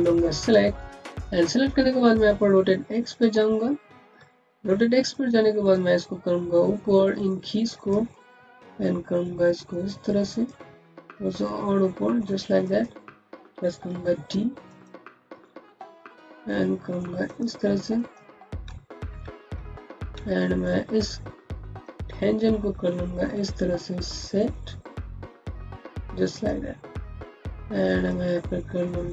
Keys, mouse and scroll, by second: 3.0 click, 3.6-4.0 scroll up 1, 4.2 alt+middle click, 5.0 click, 5.8 middle click, 7.6 click, 8.0 middle click, 10.1 click, 10.5 middle click, 12.5 click, 13.8 d, 14.5 click, 14.9-15.3 scroll up 1, 15.3 middle click, 17.1 click, 18.3 middle click, 19.4 ctrl+z, 20.2 alt+middle click, 20.5 alt+scroll down 2, 20.9 click, 22.1 middle click, 26.2 click, 26.5-27.0 scroll up 1, 27.2 click, 28.3 middle click.